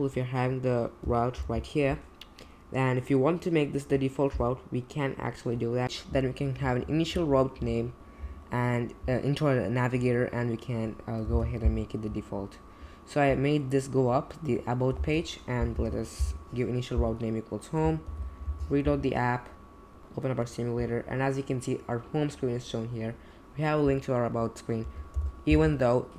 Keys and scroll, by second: 1.4 alt+Down, 11.3 super+c, 15.0 space, 15.7 super+v, 18.1 super+j, 18.5 r, 25.1 super+j.